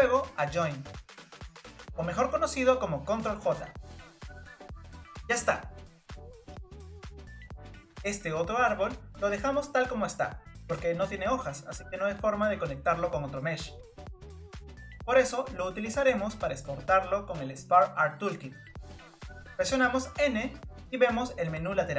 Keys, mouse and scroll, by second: 0.4-3.5 drag, 4.1-4.8 scroll down 2, 4.8-5.8 shift+middle drag, 6.9-8.8 shift+middle drag, 11.0 click, 12.4-13.3 scroll up 2, 13.3-14.2 scroll up 1, 14.2-15.4 scroll up 8, 15.4-16.9 scroll down 2, 16.9-20.2 scroll down 8, 20.2 n.